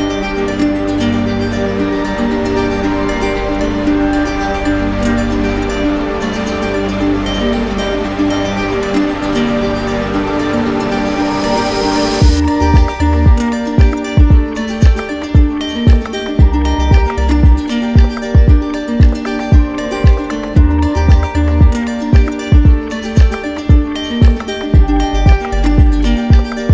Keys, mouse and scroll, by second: 2.2-3.3 middle drag, 4.6 right click, 5.1 shift+right click, 6.5 alt+middle click, 11.9 middle click, 13.7 middle click, 14.6 right click, 15.6 right click, 16.4 right click, 17.5 q, 18.6 click, 19.9 click, 20.2-21.1 typing, 22.2 click, 22.7 shift+click, 23.9 w, 26.5 click.